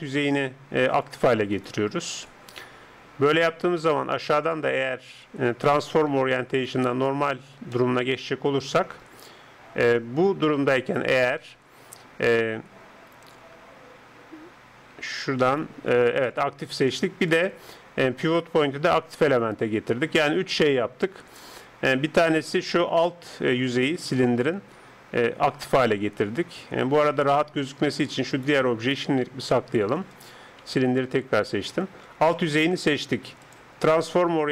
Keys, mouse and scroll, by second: 1.0 right click, 4.4-6.3 drag, 7.8-9.7 middle drag, 15.5 right click, 17.4-19.3 drag, 22.4-27.6 middle drag, 27.6 Tab, 28.3 right click, 29.5 h, 30.7 Tab, 31.9 middle click, 33.5-34.5 drag.